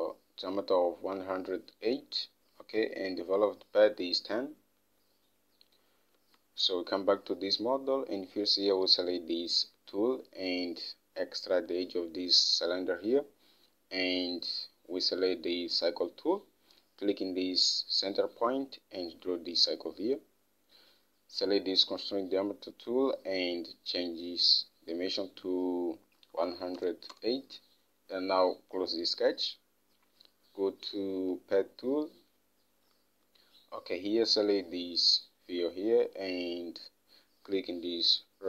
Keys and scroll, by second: 6.6 alt+Tab, 26.4-27.7 typing.